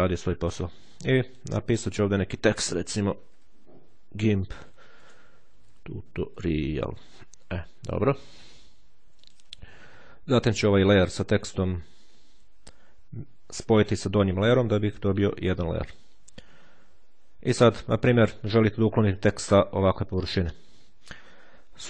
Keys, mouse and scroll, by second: 1.0 click, 2.6-4.2 typing, 5.3-7.3 typing, 9.0 click, 11.2 right click, 13.3 click, 15.8 click.